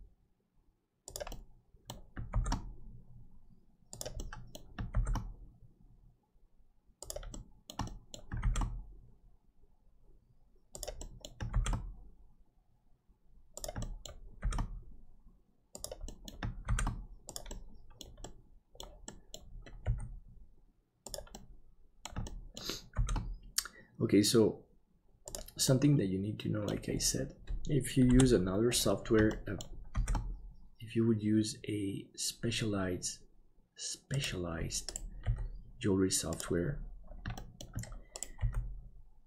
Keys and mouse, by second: 1.3 middle click, 2.3 shift+d, 4.1 middle click, 7.3 shift+middle click, 7.8 middle click, 8.4 shift+d, 11.0 middle click, 11.8 shift+d, 13.8 middle click, 16.1 middle click, 17.5 middle click, 18.3 middle click, 19.1 middle click, 19.8 g, 21.3 middle click, 22.3 shift+middle click, 22.9 shift+d, 25.7 middle click, 28.1 KP_7, 29.3 shift+middle click, 29.9 shift+d, 35.2 g, 37.3 shift+middle click, 38.3 g.